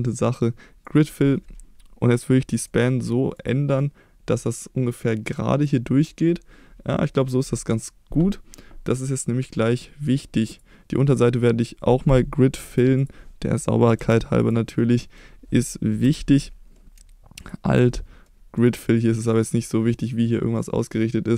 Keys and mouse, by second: 2.7 click, 9.1-10.1 middle drag, 12.6 3, 13.0 click, 14.0 x, 16.1 2, 18.7 click.